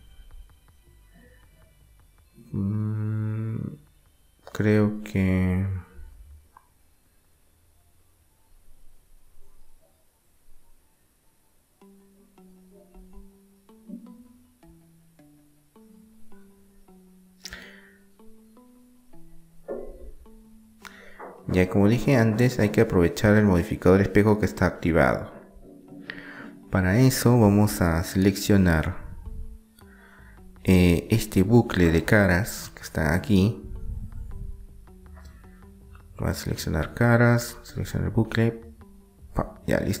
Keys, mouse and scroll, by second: 5.7-6.9 middle drag, 6.6 Tab, 6.9 click, 7.5-8.8 middle drag, 17.5-18.9 middle drag, 19.2 Delete, 21.2-22.5 drag, 22.2 Tab, 25.4 KP_1, 26.5-27.9 drag, 27.9-30.6 middle drag, 31.5-33.5 middle drag, 32.2 KP_3, 35.2 middle click, 36.5 click, 37.5 middle click, 38.4-40.0 right drag.